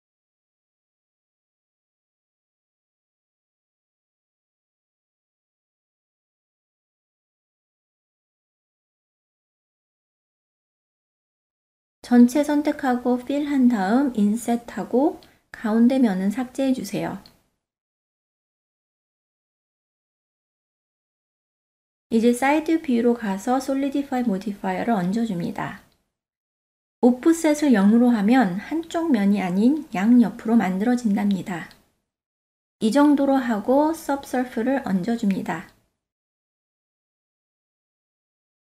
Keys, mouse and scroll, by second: 2.9 Tab, 3.6-7.9 drag, 8.3-8.9 ctrl+middle drag, 9.3-9.7 shift+middle drag, 9.8 middle click, 10.3-11.0 ctrl+middle drag, 11.8 Tab, 12.6 a, 13.0 f, 14.2 i, 19.9 Tab, 22.0 KP_3, 25.9 click, 27.2 click, 29.8-32.3 drag, 34.6-37.4 middle drag.